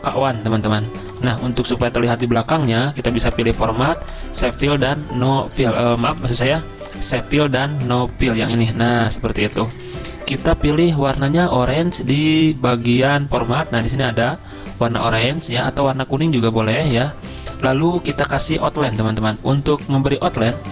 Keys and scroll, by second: 6.3 ctrl+z, 10.0 ctrl+a.